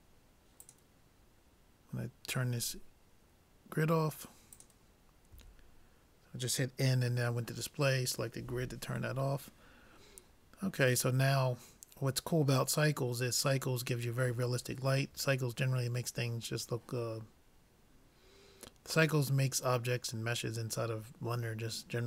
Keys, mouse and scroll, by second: 0.6-2.4 drag, 4.6-6.2 drag, 5.4 n, 9.2-11.4 middle drag, 11.7-13.3 middle drag.